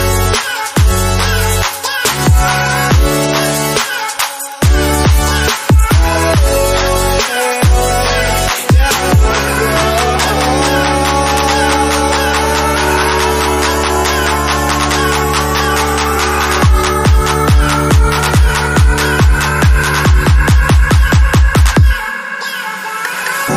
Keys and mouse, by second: 0.4 g, 6.2-7.7 shift+middle drag, 7.7 m, 9.2 g, 13.7-14.3 drag, 15.6-23.5 drag.